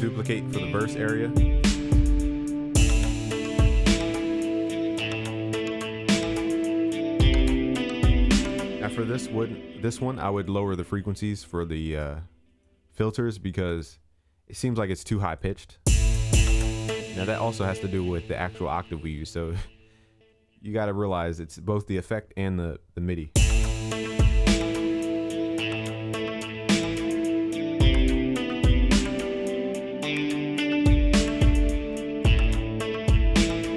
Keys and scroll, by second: 8.9 ctrl+s.